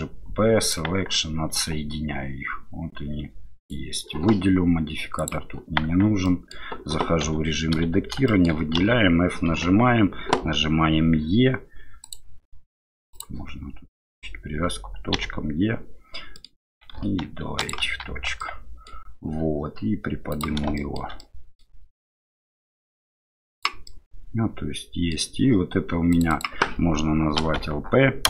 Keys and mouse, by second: 1.5 Tab, 3.6 right click, 5.8 Tab, 6.2 middle click, 7.7 a, 8.2 shift+middle click, 8.8 f, 9.5 KP_7, 12.6-17.0 drag, 18.1 Tab, 18.4 middle click, 20.3 click, 20.7 shift+middle click, 21.2 middle click, 22.5-23.6 drag, 23.8-25.1 middle drag.